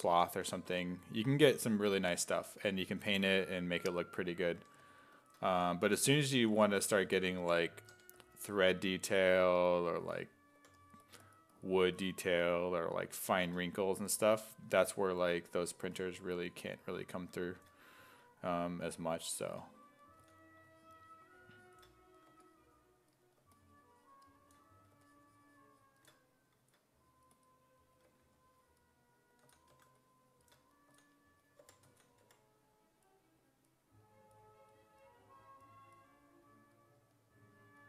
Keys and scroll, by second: 0.0-0.7 typing, 3.7-8.4 typing, 10.0 s, 10.6 4, 14.0 s, 14.7 s, 15.0 1, 15.8 1, 20.2 s, 22.3 1, 28.1 1, 29.5 s, 29.7 1, 30.9-32.8 typing.